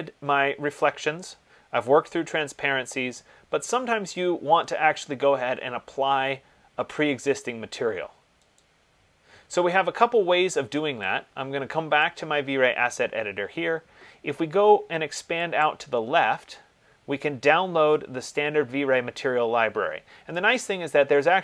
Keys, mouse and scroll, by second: 8.9 click, 12.2 click, 15.9 click, 20.9 click.